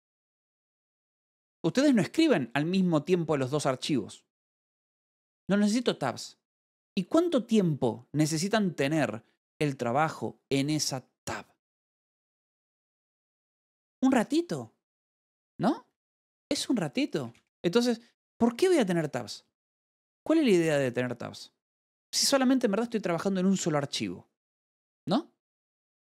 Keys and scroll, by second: 0.2 f, 0.3 Escape, 1.1 ctrl+6, 16.5 ctrl+6, 17.3-18.2 typing.